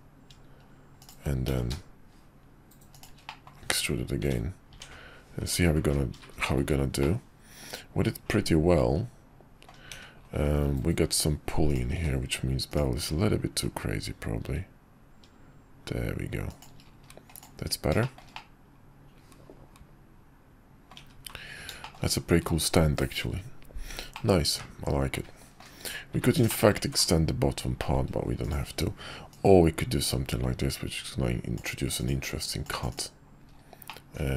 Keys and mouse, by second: 1.5 e, 3.3 middle click, 3.6 `, 4.2 `, 4.7 Tab, 6.4 shift+middle drag, 7.0-9.7 middle drag, 9.9 `, 11.7 click, 11.9 q, 17.3 middle drag, 18.0 shift+middle drag, 18.3-20.9 middle drag, 21.8 shift+middle click, 24.1-25.6 middle drag, 25.8 `, 26.5 shift+middle click, 26.7 `, 27.8 shift+middle click, 29.3-31.6 middle drag, 33.8-34.3 middle drag.